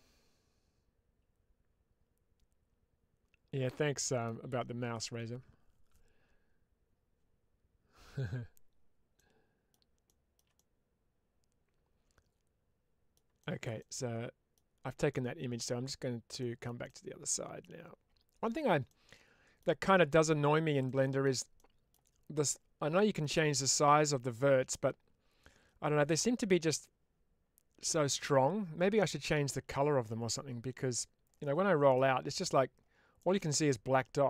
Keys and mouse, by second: 9.0 middle click, 9.9 shift+middle click, 10.4-13.0 middle drag, 13.7 middle click, 15.0 middle click, 16.5 shift+middle click, 16.8 middle click, 18.8 middle click, 20.8 middle click, 22.8 middle click, 31.8 middle click, 33.1 middle click.